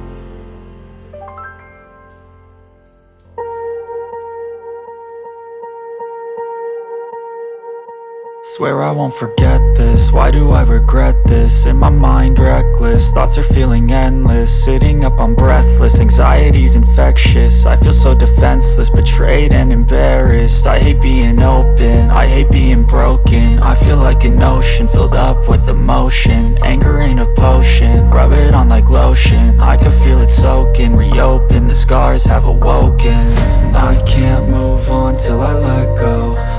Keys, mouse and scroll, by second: 0.0-0.8 typing, 0.5 click, 1.5-20.4 drag, 20.4 scroll down 1.